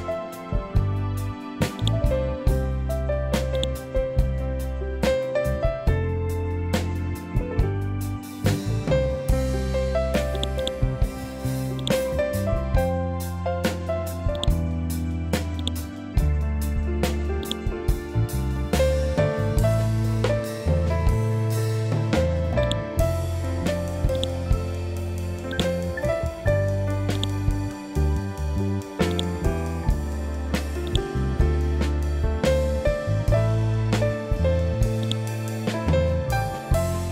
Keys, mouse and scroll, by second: 1.7 click, 1.7-3.4 drag, 3.9-4.5 scroll down 1, 8.2-8.7 scroll up 1, 10.3 click, 14.3 click, 18.6 F12, 19.2 Tab, 20.3 3, 20.5 Return, 22.5-37.1 drag.